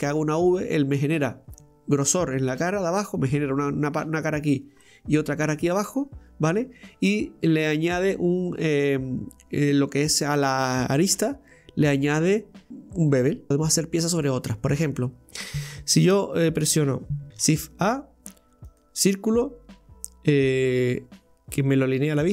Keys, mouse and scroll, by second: 4.9-13.5 middle drag, 13.5 click, 14.2 scroll down 1, 14.3-15.0 middle drag, 15.0-15.4 scroll down 1, 17.3 ctrl+KP_3, 18.8 shift+a.